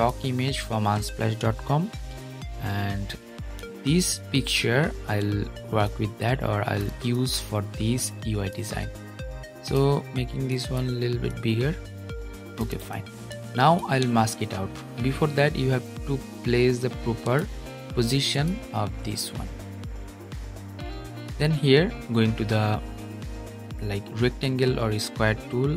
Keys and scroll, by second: 3.3 super+-.